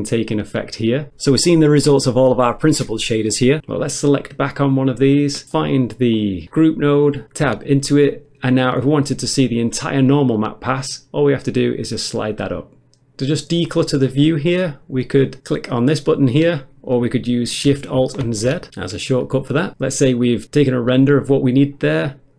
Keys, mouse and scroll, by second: 15.4 click, 16.0 click, 18.2 alt+shift+z.